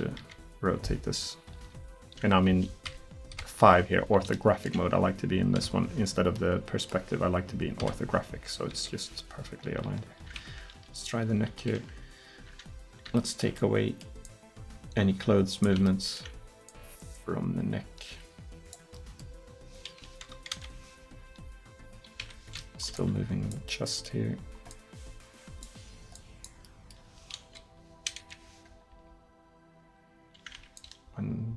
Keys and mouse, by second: 0.0-0.2 typing, 1.7 r, 2.9 KP_5, 3.5 KP_5, 5.6 KP_5, 7.9 KP_5, 8.8 KP_3, 9.7 r, 11.0-12.0 drag, 11.3 r, 14.3-19.0 drag, 20.1 KP_1, 20.6 KP_3, 21.3 r, 23.9 middle click, 27.5 KP_1, 28.3 KP_3, 29.0 r.